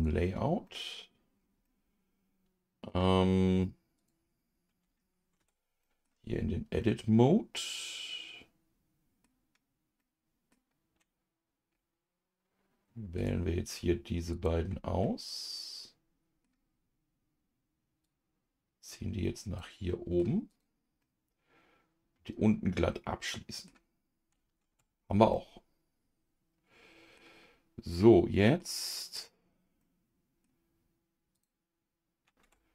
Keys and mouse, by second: 0.6 middle click, 1.6-2.9 middle drag, 4.0 click, 5.7 Tab, 5.8 middle click, 6.8-9.2 middle drag, 10.0 middle click, 13.1 click, 14.3 shift+click, 15.0-16.4 middle drag, 18.0-19.8 drag, 19.8 middle click, 20.5 click, 21.0-23.6 middle drag, 24.7 Tab, 25.3-27.2 middle drag, 27.9 middle click, 29.1 click, 29.8 middle click, 31.3 click, 32.4 Tab.